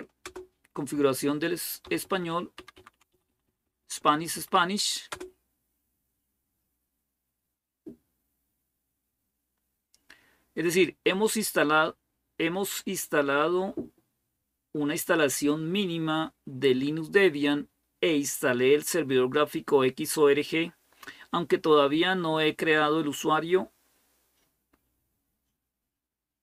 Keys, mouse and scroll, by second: 0.0 Return, 1.6 Up, 1.8 Up, 2.0 Up, 2.4 Down, 2.6 Down, 2.7 Down, 2.9 Up, 3.1 Up, 3.2 Up, 3.4 Up, 4.9 Up, 4.9 Return.